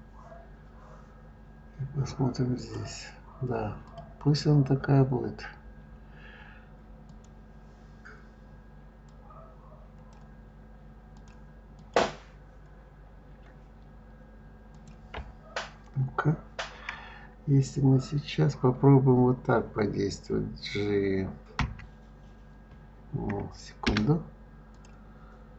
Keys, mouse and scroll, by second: 2.6 click, 3.8 click, 4.8-5.4 scroll up 3, 5.4-7.0 scroll down 4, 7.0 click, 9.1-11.3 drag, 11.7 click, 13.1-14.4 scroll up 2, 14.7 click, 21.6 g, 24.7 click.